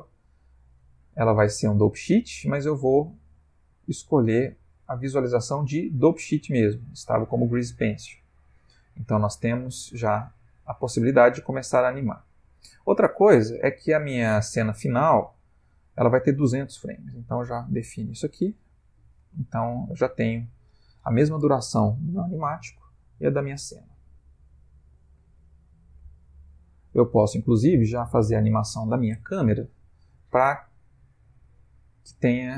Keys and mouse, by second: 0.0 click, 2.8 click, 8.7 click, 11.2 space, 11.9 Escape, 16.1 ctrl+click, 17.6 0, 19.1 space.